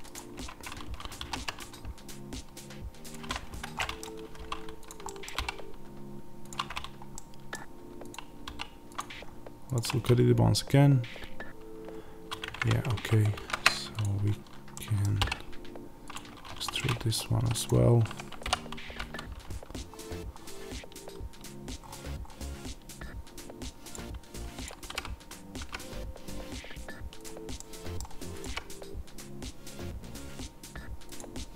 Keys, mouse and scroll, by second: 0.0 click, 0.3 Tab, 1.1 ctrl+r, 3.5 Escape, 3.7-4.8 middle drag, 4.3 3, 4.8 click, 5.0-6.4 middle drag, 5.3 e, 6.4 click, 7.0 middle click, 8.0 click, 8.4 e, 8.9 click, 12.5 click, 13.3 ctrl+z, 13.9 click, 14.6-16.4 middle drag, 15.1 e, 16.4 1, 16.7 middle click, 17.6 click, 18.3 o, 23.8 click, 24.7 g, 27.2 click, 27.5 middle click, 28.3 click, 28.4 g, 31.1 click.